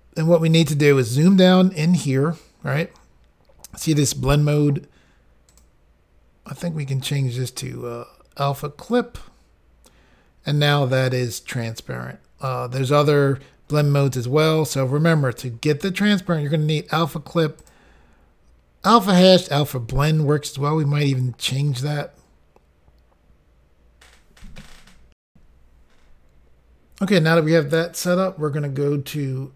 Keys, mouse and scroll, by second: 5.6 click, 5.7 click, 8.9 click, 9.0 click, 17.7 click, 25.2 Insert.